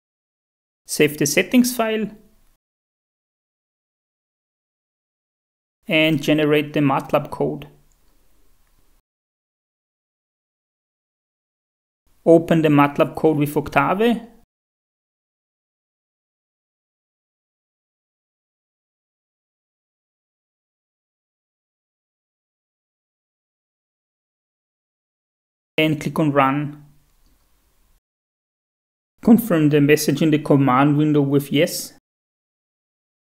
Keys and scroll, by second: 3.9-5.5 typing, 29.0-29.9 typing.